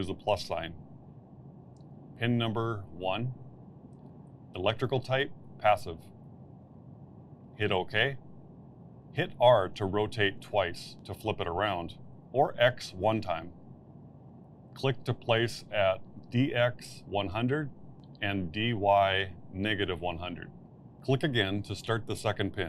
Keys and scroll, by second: 2.6 KP_1, 11.7 r, 11.8 r, 13.3 x.